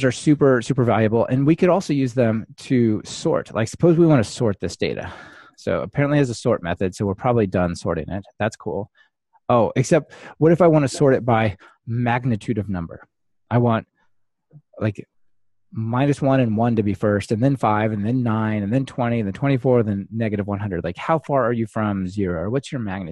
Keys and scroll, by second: 0.9 ctrl+alt+shift+Right, 8.2 ctrl+r.